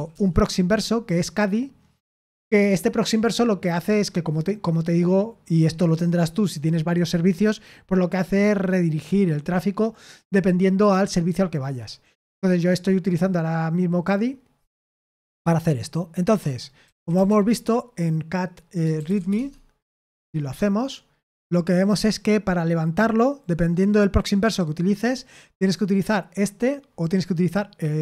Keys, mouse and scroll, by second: 0.0-0.3 typing, 16.5-17.6 typing, 18.7-19.7 typing.